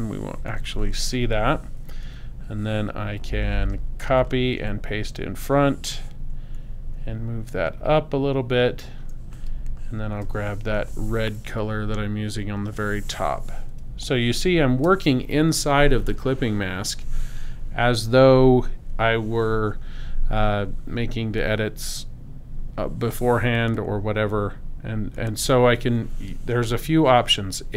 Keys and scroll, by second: 2.0 v, 4.6 super+f, 10.7 i, 13.8 space.